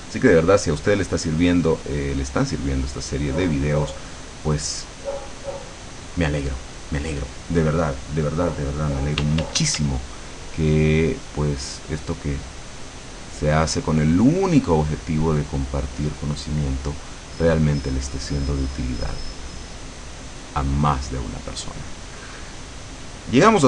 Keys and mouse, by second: 1.7-4.0 drag, 9.3 d, 10.0-16.6 drag, 21.0-22.4 drag, 23.0-23.6 drag.